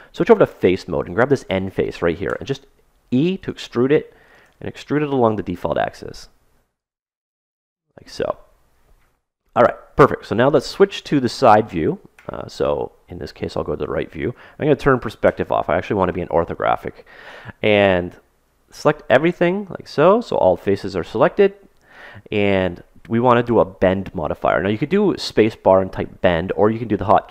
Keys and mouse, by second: 1.0-2.6 drag, 2.2 e, 2.6 right click, 3.6 e, 4.4 e, 5.5 e, 7.0 e, 12.1 KP_3, 15.2 KP_5, 18.1 a, 18.4 a, 19.6-21.6 middle drag, 21.0 KP_3.